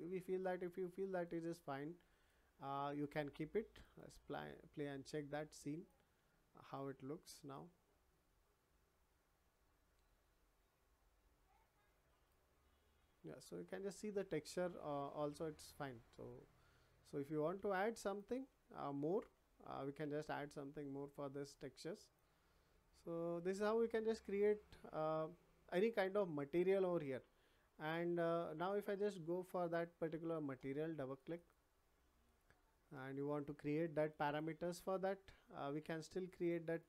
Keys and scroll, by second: 19.1 Escape.